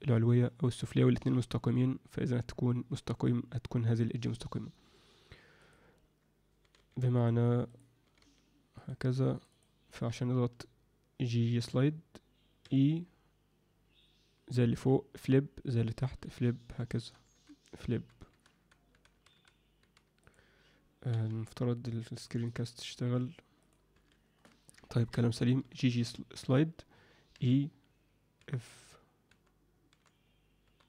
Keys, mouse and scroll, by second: 5.5 click, 6.6 g, 8.0 g, 9.5 click, 11.2 g, 21.1 n, 23.9 n, 24.9 ctrl+alt+middle click, 25.6 g.